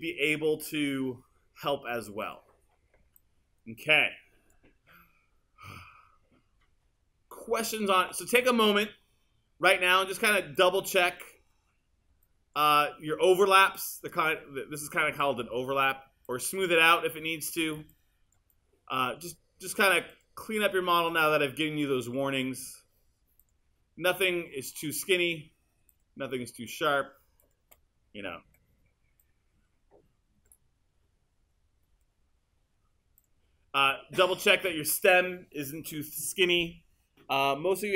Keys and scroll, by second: 28.5 r.